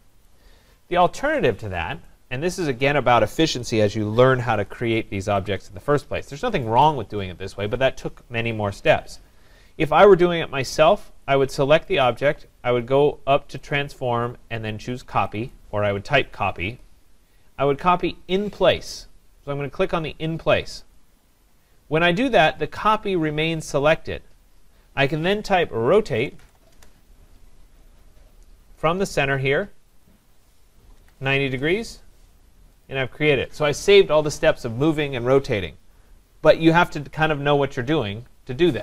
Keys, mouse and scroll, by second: 0.2 right click, 1.2 ctrl+z, 2.5 right click, 5.5 click, 11.3 click, 13.8 click, 15.5 click, 21.0-26.0 drag, 25.7-26.9 typing, 30.0 click, 30.7-31.5 typing, 32.9 click, 36.6 click.